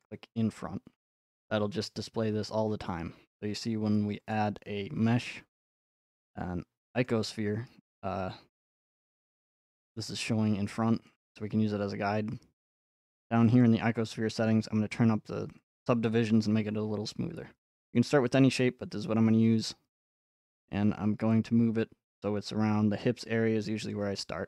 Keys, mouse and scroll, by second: 0.0-2.1 drag, 4.3-6.4 drag, 7.0-9.1 drag, 13.6-15.7 drag, 15.7 middle click, 16.8 middle click, 19.1 middle click, 20.4 click, 23.9 click, 24.3 scroll.